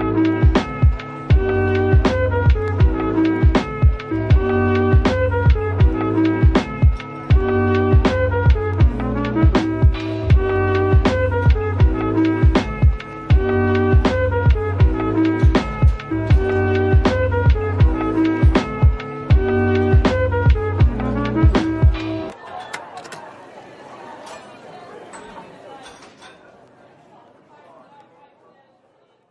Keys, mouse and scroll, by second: 0.0-0.3 scroll down 1, 0.3 Tab, 1.0-1.3 scroll down 1, 1.6-2.4 scroll down 1, 2.5 typing, 2.8 scroll down 1, 3.5 typing, 4.3 scroll down 1, 4.9 scroll up 1, 5.7 typing, 12.5-13.2 typing, 17.1 typing, 18.5 typing, 19.3-20.2 scroll down 1, 20.2 typing, 27.6-28.6 typing.